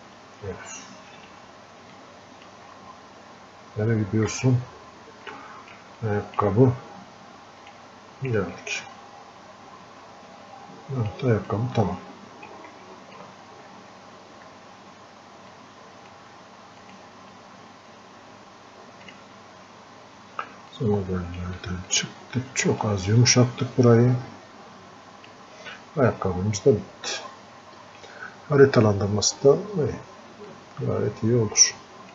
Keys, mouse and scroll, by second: 0.1 f, 2.0 click, 2.8-3.3 scroll up 1, 4.3 f, 5.3 click, 6.0-11.5 alt+drag, 11.5-13.7 drag, 13.7 scroll up 1, 14.1 scroll down 1, 15.7-21.9 drag, 21.1 click, 23.2 click, 25.7-26.3 scroll up 1, 26.4-26.9 scroll down 1, 30.5-32.1 drag.